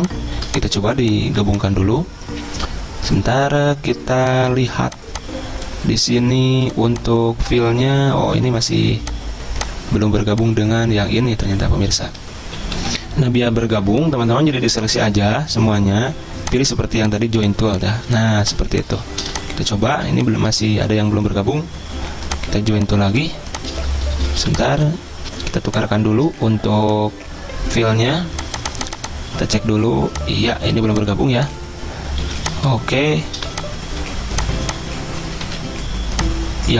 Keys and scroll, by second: 7.9 ctrl+z, 12.9 ctrl+z, 12.9 F10, 19.3 v, 24.5 v, 32.3 z, 33.5 v, 35.5 a.